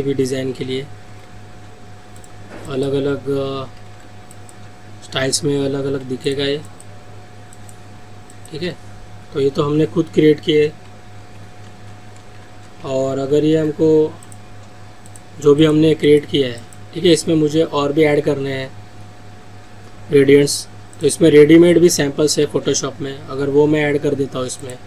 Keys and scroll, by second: 1.1 ctrl+z, 11.2 ctrl+z, 12.4 ctrl+alt+z.